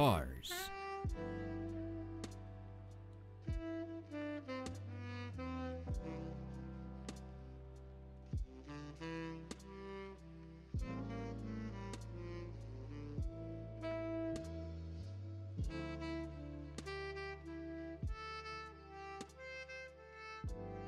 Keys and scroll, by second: 0.4 space, 3.5 p, 7.4 ctrl+z, 12.7 ctrl+s.